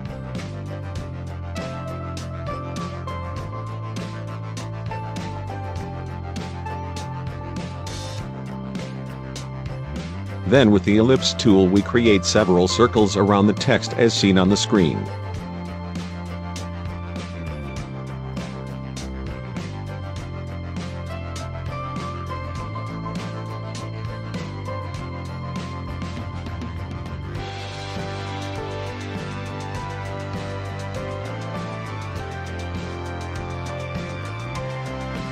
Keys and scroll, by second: 25.9 ctrl+j, 27.0 ctrl+t, 32.7 ctrl+j.